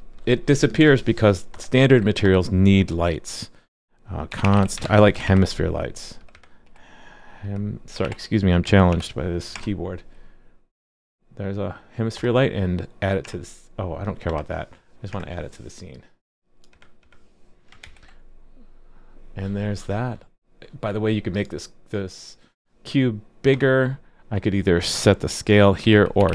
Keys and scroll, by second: 17.8 super+s.